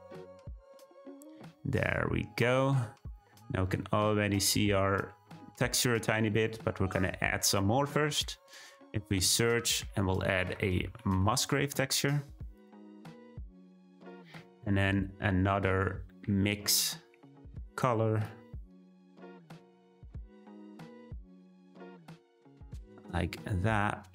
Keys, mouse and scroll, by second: 2.2-3.1 scroll up 1, 3.1-3.9 shift+middle drag, 3.9-4.7 scroll up 1, 4.7-5.9 scroll down 1, 5.9-7.7 scroll down 1, 7.7-12.6 drag.